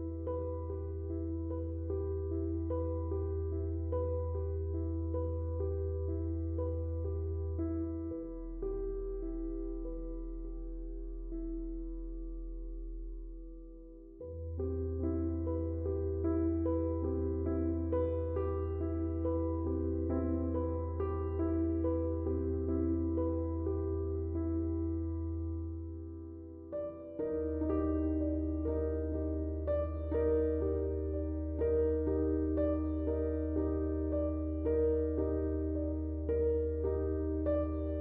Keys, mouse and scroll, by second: 2.9-6.5 drag, 9.8-18.1 drag, 14.4 typing, 23.6 click, 23.6 typing, 27.7 Tab, 28.8 click, 32.6-38.0 drag.